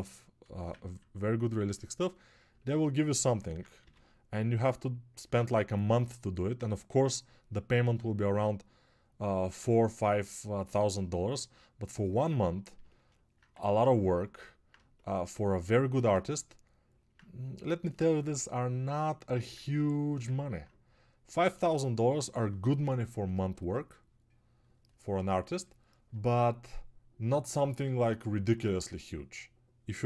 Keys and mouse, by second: 16.0 alt+1, 16.1-20.4 ctrl+alt+drag, 16.1-20.4 ctrl+alt+middle drag, 16.1-20.4 ctrl+alt+right drag.